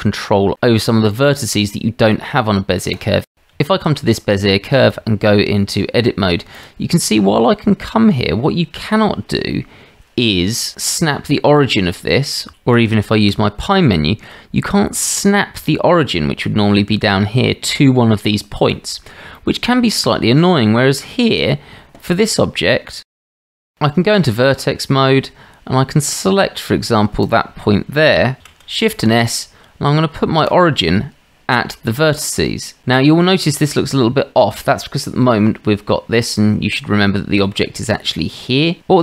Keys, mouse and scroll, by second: 0.3 Tab, 2.9 click, 3.3 Tab, 3.6-4.0 shift+drag, 5.0 Tab, 6.5 click, 7.1-7.6 shift+drag, 8.8 click, 13.1 shift+s, 19.4 shift+drag, 20.3-21.0 shift+drag, 22.5 Tab, 23.1-23.7 drag, 23.7 Tab, 24.5-25.0 shift+drag, 27.3 click, 28.4 shift+s, 32.0-32.8 middle drag, 33.3-34.7 middle drag, 36.2 click, 37.0 middle click, 38.8 Tab.